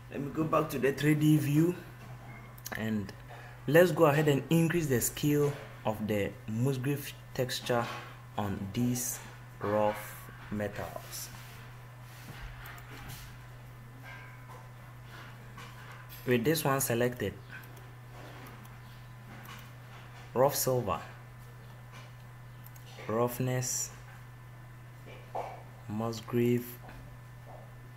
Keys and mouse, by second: 3.6-5.7 drag, 13.7-15.6 drag, 17.4-18.4 drag, 22.4-27.9 middle drag.